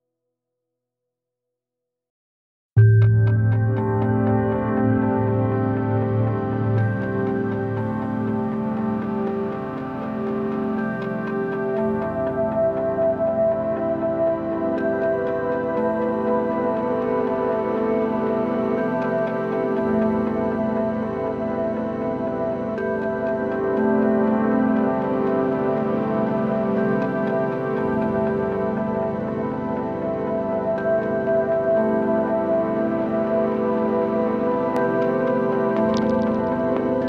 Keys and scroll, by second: 3.5 space, 19.2 super+z, 30.9 super+s, 31.3 Right, 31.6 BackSpace, 31.8 4, 32.2 Return.